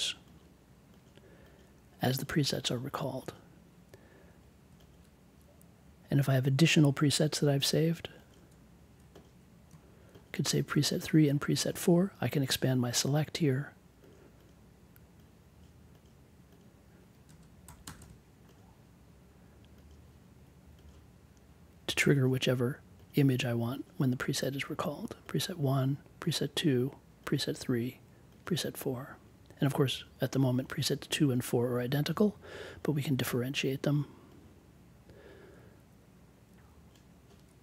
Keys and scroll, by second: 17.2 space, 17.6 3, 17.8 space, 18.0 4.